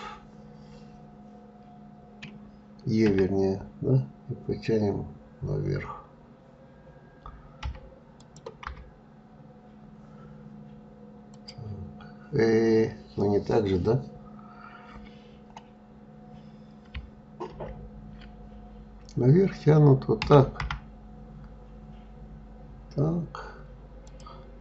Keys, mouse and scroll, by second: 2.6 e, 8.2 KP_3, 9.3-10.3 scroll down 3, 10.9 click.